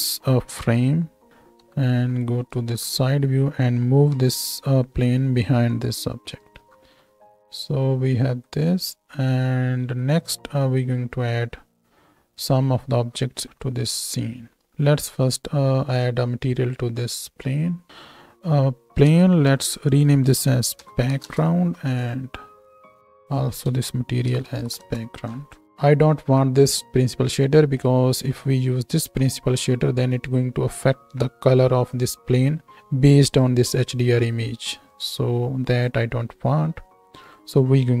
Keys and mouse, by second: 0.5 r, 1.3 s, 1.6 KP_3, 4.1 g, 6.7 s, 7.0 z, 8.7 z, 10.1 z, 11.3-17.2 drag, 11.3-17.2 right drag, 15.7-25.7 middle drag, 19.4 F2, 22.7-31.5 drag, 22.7-25.7 right drag, 26.2-35.8 middle drag, 26.2-31.5 right drag, 28.4 z, 35.8-37.2 right drag, 37.2 middle click, 37.3-38.0 shift+right drag.